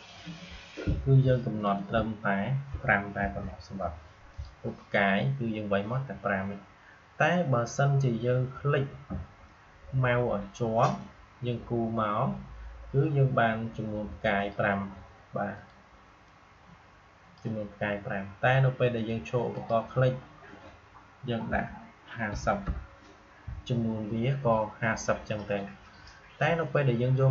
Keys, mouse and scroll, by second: 0.1 click, 11.0-19.0 drag, 27.2-27.3 drag.